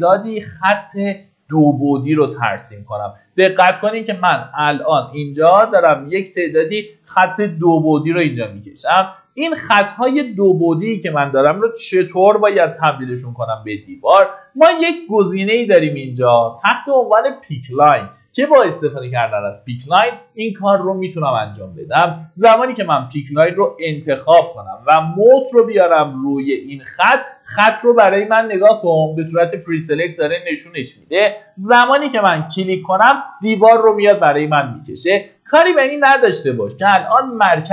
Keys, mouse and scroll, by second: 7.2 Escape, 8.7 middle click, 11.8-12.5 typing, 20.7 click, 24.0 scroll up 1, 32.2 click, 34.6-35.2 scroll up 1.